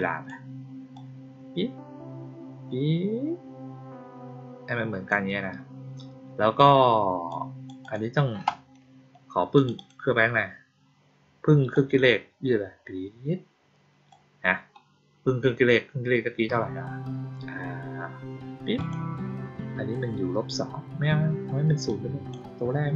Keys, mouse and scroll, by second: 0.9-5.0 drag, 7.2 click, 7.7 click, 9.5 click, 9.7 click, 11.6-14.0 drag, 18.7 click, 21.8-22.2 drag.